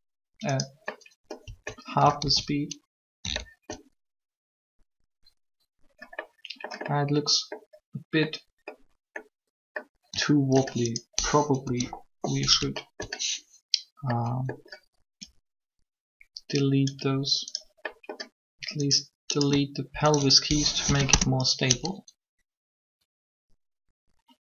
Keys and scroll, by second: 2.2 alt+a, 11.6 alt+shift+3, 20.5 shift+Delete, 20.9 Return.